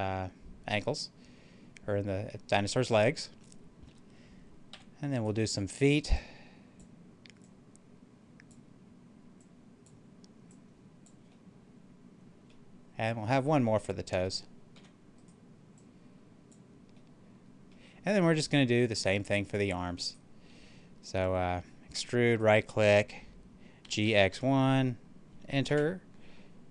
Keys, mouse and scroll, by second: 4.6 e, 5.0 right click, 6.0-11.2 drag, 11.2-14.7 middle drag, 14.7 e, 15.1 right click, 15.7 click, 16.9 middle click, 20.0 right click, 21.8 e, 22.2 right click, 23.7-24.2 typing, 25.6 Return.